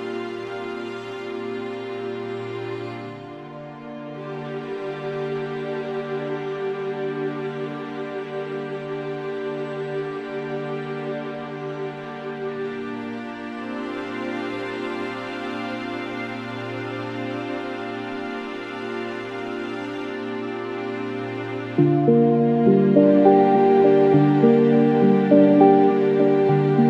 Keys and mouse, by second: 0.0 alt+click, 1.5 double click, 5.2 alt+click, 6.0 double click, 6.8 alt+click, 8.3 alt+click, 14.3 alt+click, 16.2 alt+click, 21.9 alt+click, 26.0 alt+click.